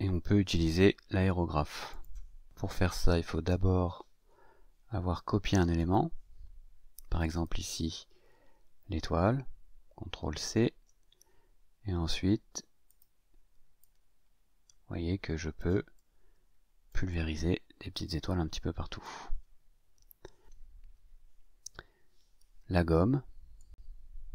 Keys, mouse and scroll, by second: 1.9 click, 3.1-3.5 scroll up 2, 3.8-4.5 scroll up 4, 5.7 click, 7.2 click, 10.3 ctrl+c, 12.8 click, 13.8-15.7 drag, 15.9-17.0 drag, 17.1-19.1 drag, 20.4 ctrl+z, 23.5 click, 23.7-24.3 drag.